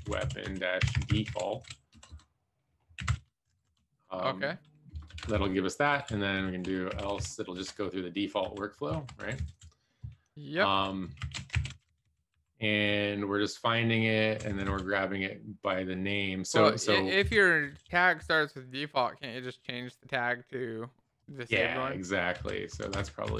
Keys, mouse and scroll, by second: 0.0-2.0 typing, 3.1 BackSpace, 3.4 Right, 3.6 Right, 3.9 Right, 4.9 Return, 5.3 shift+[, 5.9 Down, 6.0 Down, 7.7 Return, 7.7 shift+[, 8.2 Up, 8.4 Up, 9.1 shift+Delete, 9.1 Down, 9.4 Down, 9.5 Down, 10.5 shift+Up, 11.1 alt+shift+f, 11.5 ctrl+s, 11.7 Down, 11.8 Down, 12.0 Down, 12.3 Down, 13.9 Right, 14.0 Right, 17.2 Down, 17.5 Up, 17.7 Up, 17.8 Up, 18.1 Up, 18.9 Up, 19.6 Down, 21.5 shift+Up, 22.3 shift+Home, 22.6 shift+Right, 23.0 Delete, 23.2 u.